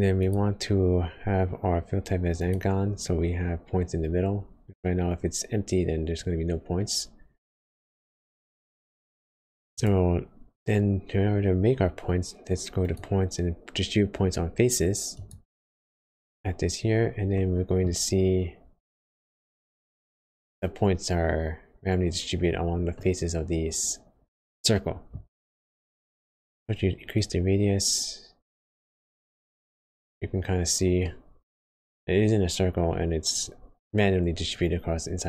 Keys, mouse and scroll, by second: 0.1 click, 5.1 scroll up 1, 5.7 scroll up 1, 6.1 scroll down 1, 7.5 middle click, 7.5 scroll down 1, 8.3-8.9 scroll up 3, 9.2 scroll down 2, 9.5-10.0 scroll up 3, 9.7 click, 10.3 scroll down 1, 10.8 shift+a, 11.0 scroll up 2, 17.3 middle click, 18.0 scroll up 1, 20.4 scroll up 2, 21.4 scroll down 2, 22.9 middle click, 22.9 scroll down 1, 27.1 click, 31.0 middle click, 31.0 scroll down 4, 32.0-32.5 scroll up 1.